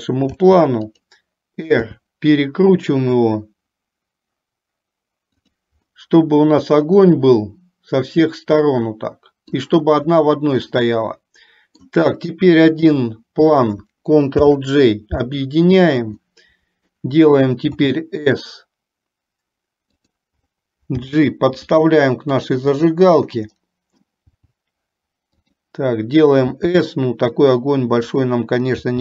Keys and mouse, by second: 0.4 shift+d, 1.9 r, 6.1-9.8 middle drag, 10.8-11.9 middle drag, 14.4 ctrl+j, 16.3 middle click, 17.8 s, 21.2 g, 23.8 middle click, 25.3 g, 26.8 s.